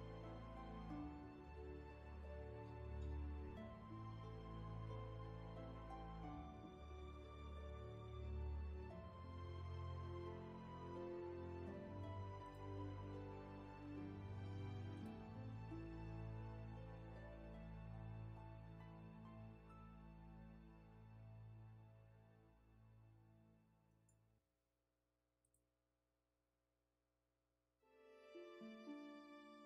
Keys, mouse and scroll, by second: 0.6 scroll down 1, 1.0 space, 4.7 space, 5.1-6.7 scroll down 1.